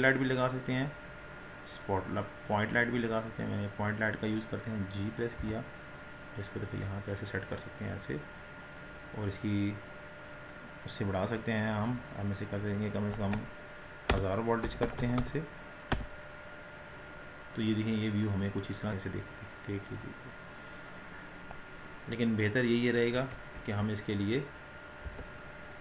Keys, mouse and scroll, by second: 5.5 g, 16.0 KP_0, 18.9-22.2 scroll up 7, 23.7 ctrl+z, 24.8 click, 25.6 Delete.